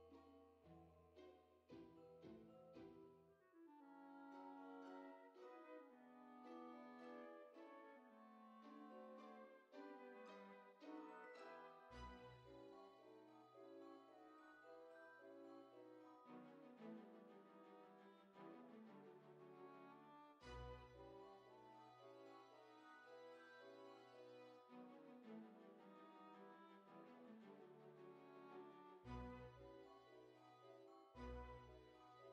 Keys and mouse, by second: 0.7 click, 1.7 F6, 2.4 click, 6.7 click, 7.4-9.3 typing, 8.5 click, 11.3 click, 12.7 click, 13.9 click, 14.9 click, 15.7 click, 17.3 click, 19.3 click, 21.6 click, 23.2 Return, 23.2 KP_Enter, 26.6 click, 31.7 middle click.